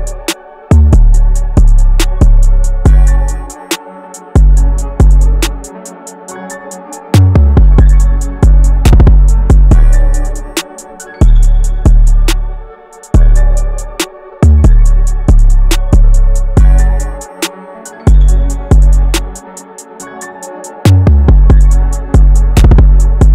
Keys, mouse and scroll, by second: 20.8 double click, 21.8-23.3 scroll down 1.